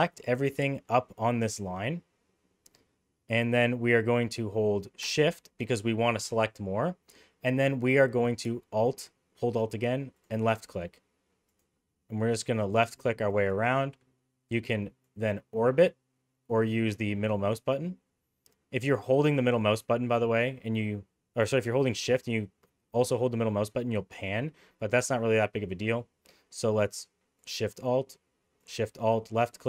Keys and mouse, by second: 1.6-3.3 middle drag, 11.5 alt+shift+click, 12.7 alt+shift+click, 13.2 alt+shift+click, 15.0-16.6 shift+drag, 17.1 shift+middle click, 19.1-24.3 shift+middle drag, 28.6 alt+shift+click.